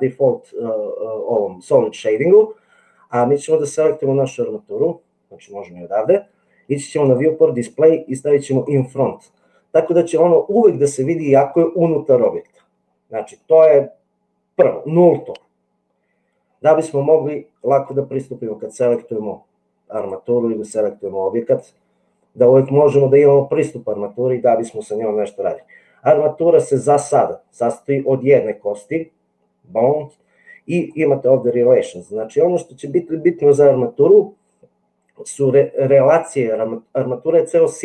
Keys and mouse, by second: 7.1 click, 8.6 click, 9.5-11.2 middle drag, 21.4 click, 30.7 click.